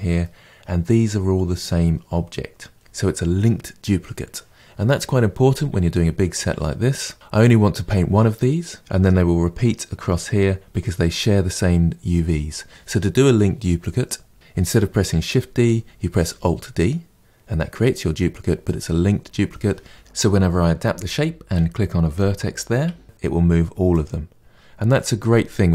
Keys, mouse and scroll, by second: 0.1-8.3 middle drag, 23.1 g.